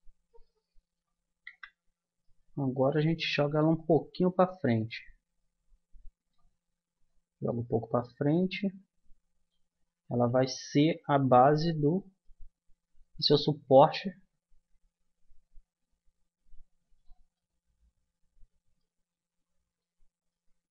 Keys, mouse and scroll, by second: 1.4 z, 3.7-5.5 drag, 6.7-8.3 middle drag, 11.1-12.7 drag, 12.7-14.1 middle drag, 14.1-15.9 drag, 17.3-20.0 middle drag.